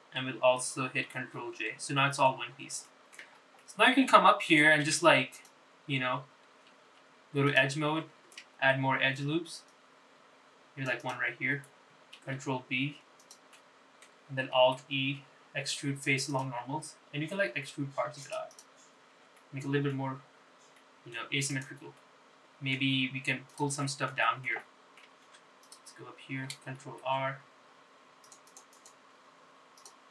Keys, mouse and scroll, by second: 2.5 ctrl+j, 3.1 middle click, 3.6 scroll up 3, 4.0 shift+middle click, 4.4 scroll up 2, 4.7 middle click, 5.4 shift+middle click, 6.0 Tab, 6.5 click, 8.1 2, 8.6 click, 9.8 ctrl+r, 13.4 ctrl+b, 14.6 middle click, 15.7 alt+e, 19.6 click, 20.0-20.4 scroll down 2, 20.4 Tab, 20.5 middle click, 21.6-21.9 scroll down 2, 21.9 middle click, 22.6 click, 23.1 middle click, 24.2-24.6 scroll up 2, 24.6 click, 25.0 middle click, 25.4 shift+middle click, 25.7 middle click, 26.4 Tab, 26.8 click, 28.0 ctrl+r, 30.0 click.